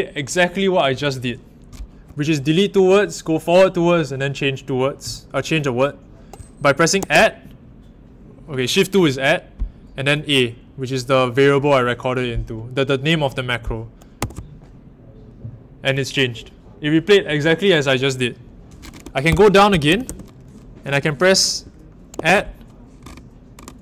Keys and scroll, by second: 6.9 shift+2, 14.1 a, 19.0-20.5 typing, 22.1 shift+2.